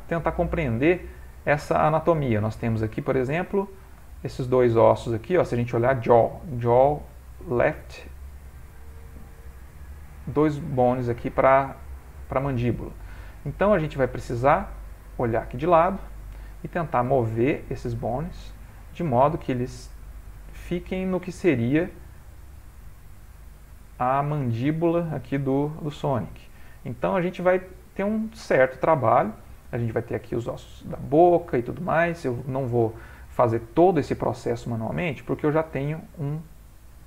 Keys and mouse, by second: 0.1 shift+middle click, 0.6 middle click, 3.1 click, 4.1 shift+click, 7.0 click, 8.5 click, 10.4 click, 10.8 click, 11.7 click, 12.5 click, 13.5 shift+click, 15.1 click, 16.8 g, 18.9 click, 19.3 g, 23.3 click, 23.6 g, 25.1 click, 25.3 g, 26.8 middle click, 29.9 middle click, 32.4-32.8 ctrl+middle click, 32.6 ctrl+middle click, 32.8 middle click, 32.9 shift+middle click, 33.3 middle click, 35.7 Tab, 36.3 x.